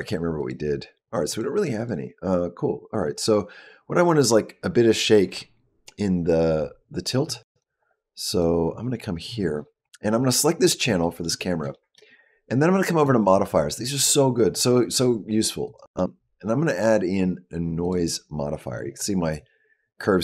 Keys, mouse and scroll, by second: 0.2 click, 0.9 click, 1.1 click, 1.4 click, 1.6 click, 7.3 click, 7.6 click, 8.1 click, 10.8 shift+middle click, 11.5 shift+middle click, 12.8 click, 15.5 click.